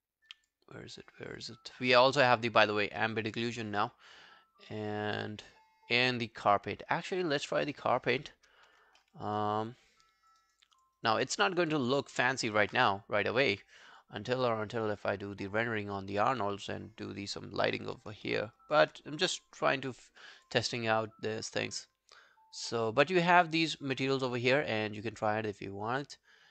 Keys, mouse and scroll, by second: 4.4-7.4 scroll down 3, 8.6 scroll down 4, 9.0 alt+middle click, 9.3 alt+right click, 9.5 alt+click, 10.4 alt+right click, 10.7 alt+click, 11.0 alt+right click, 11.2 alt+middle click, 11.5 alt+right click, 11.7 alt+click, 12.1 alt+right click, 16.6 scroll down 1, 18.0 scroll down 1, 18.3 alt+middle click, 18.6 alt+right click.